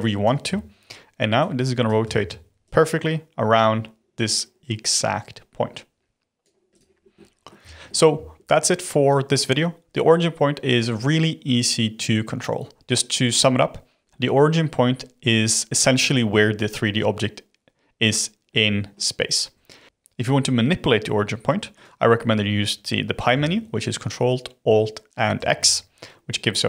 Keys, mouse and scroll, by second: 1.3 click, 2.1 ctrl+z, 2.6 click, 6.7 click, 6.9 scroll down 1, 7.1-10.8 middle drag, 18.4-19.8 middle drag, 21.7 click, 25.3 ctrl+alt+x.